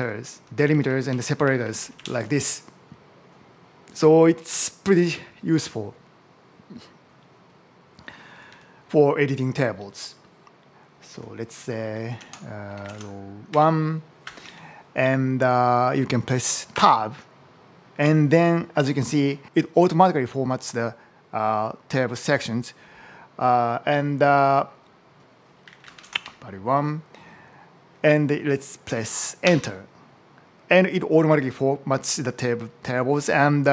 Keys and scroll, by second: 0.1 Up, 0.4 Down, 0.7 Right, 0.9 Up, 1.1 Right, 1.8 Down, 8.1 Left, 11.0 Left, 11.4-14.4 typing, 16.7 Tab, 18.9 Up, 19.3 Right, 19.4 Left, 25.3-26.7 typing, 29.3 Return.